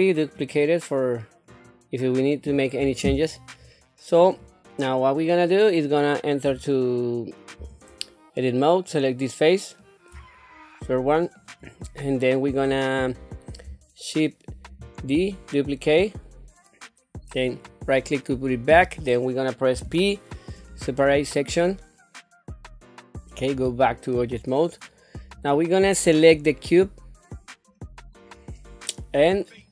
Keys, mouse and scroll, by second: 0.3 click, 1.5-4.2 drag, 4.9 middle click, 7.6 Tab, 8.3 middle click, 10.3-11.3 shift+middle drag, 14.8 shift+d, 19.7 p, 23.5 Tab, 25.3 click, 26.6-27.7 middle drag, 29.6 click.